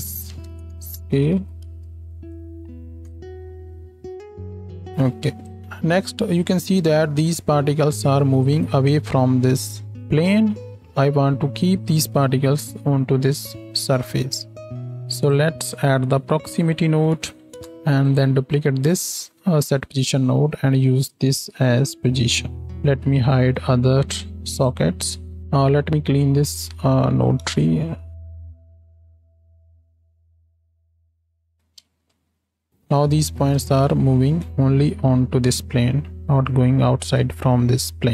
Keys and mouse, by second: 1.4 shift+Left, 1.6 space, 3.0 KP_7, 9.8-10.8 middle drag, 12.1 g, 14.3-19.6 drag, 14.7-17.7 middle drag, 14.7-17.7 right drag, 18.4 shift+d, 19.6-22.2 middle drag, 22.2-23.7 drag, 22.9 ctrl+h, 23.7-25.4 middle drag, 25.4 ctrl+z, 25.4 ctrl+s, 25.4-28.9 drag, 28.3 g, 28.9 middle click, 29.8 click, 30.0 middle click, 30.8 shift+click, 31.2 shift+Right, 31.4 alt+click, 31.6 alt+a, 31.8 space, 32.2-33.3 drag, 33.3 shift+Left, 33.4-34.7 drag, 33.6 space, 35.3-36.7 drag.